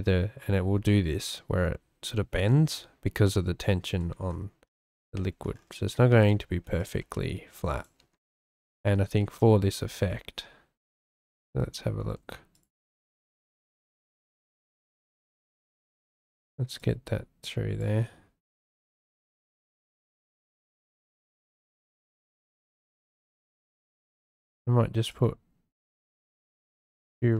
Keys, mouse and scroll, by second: 5.2 shift+click, 6.1 g, 6.8 click, 7.0 s, 7.8 click, 8.0 g, 12.0 s, 12.5 click, 12.8 g, 16.8-17.8 drag, 19.4 s, 21.1 shift+d, 22.1 s, 22.7 g, 23.6 click, 24.2 shift+d, 25.8 shift+click, 27.0 shift+d.